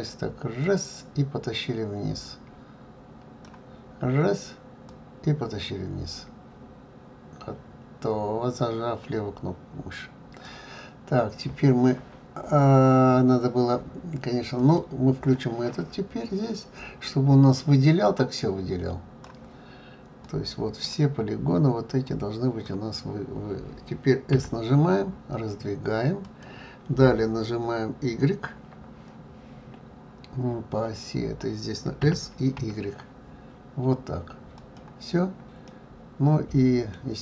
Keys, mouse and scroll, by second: 4.9-7.9 drag, 14.5-17.6 drag, 18.0-20.3 drag, 22.0 click, 24.3 s, 35.7-37.2 middle drag.